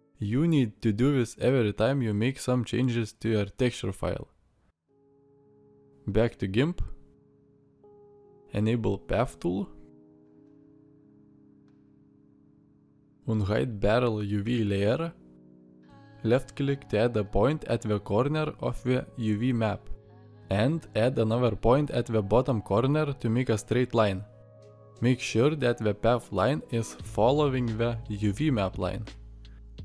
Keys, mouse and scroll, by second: 4.6-5.8 middle drag.